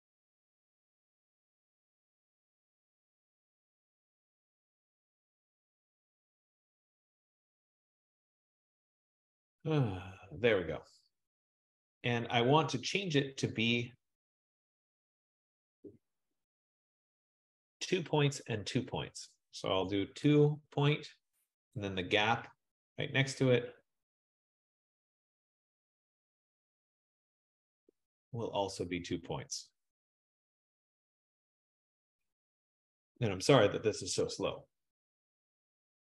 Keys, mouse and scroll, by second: 0.0 F15, 19.4 click, 19.9 2, 22.1 click.